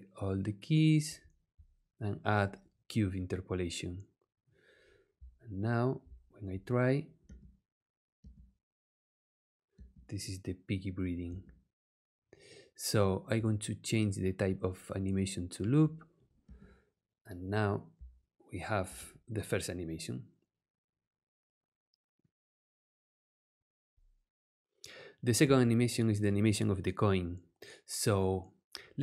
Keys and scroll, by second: 7.2 space, 9.7 space, 11.2 space, 16.4 space, 25.4 space.